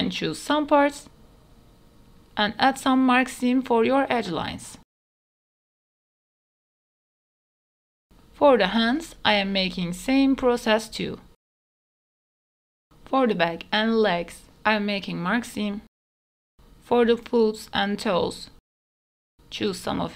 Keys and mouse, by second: 0.4 alt+click, 0.5 middle click, 0.9 alt+click, 1.6 middle click, 2.0 middle click, 2.3 middle click, 2.5 shift+middle click, 2.9 alt+shift+middle click, 3.6 alt+shift+click, 3.8 middle click, 4.4 middle click, 4.6 shift+middle click, 4.9 middle click, 5.6 click, 6.5 alt+click, 6.6 middle click, 7.0 shift+middle click, 7.1 middle click, 7.6 shift+middle click, 8.6 alt+click, 9.4 middle click, 9.6 shift+middle click, 10.1 middle click, 10.6 ctrl+click, 11.3 middle click, 11.8 shift+middle click, 12.2 middle click, 12.4 shift+middle click, 13.2 middle click, 13.7 middle click, 13.9 shift+middle click, 14.0 middle click, 14.4 middle click, 14.7 ctrl+middle click, 15.2 middle click, 15.6 ctrl+z, 15.8 middle click, 16.9 middle click, 17.3 middle click, 18.0 middle click, 18.6 ctrl+click, 18.7 middle click, 19.0 middle click, 19.5 ctrl+click, 19.8 middle click.